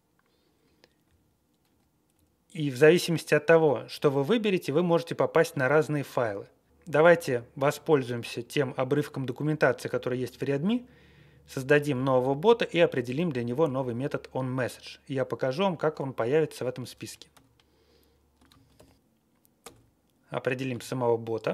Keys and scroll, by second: 1.0 Down, 1.6 Up, 2.1-2.6 Left, 2.6 Left, 3.4 Down, 3.8 Up, 4.3 Down, 5.4 Up, 5.5 Up, 5.9 Down, 6.1 Down, 17.3 q, 18.4 ctrl+a, 18.7 ctrl+k, 19.6 Return.